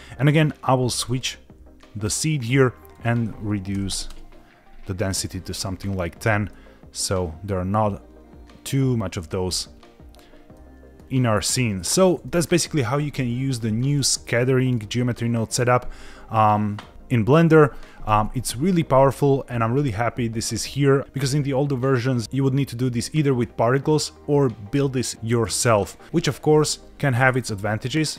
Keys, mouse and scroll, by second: 1.1 click, 3.0-4.3 drag, 6.5-9.3 middle drag, 9.8-10.5 scroll up 1, 10.5 middle click, 11.1-11.4 scroll down 2, 11.8 middle click, 12.3 shift+middle click, 12.7 scroll down 1, 14.0 shift+middle click, 14.4 middle click, 15.1-15.6 scroll up 1, 27.4 click.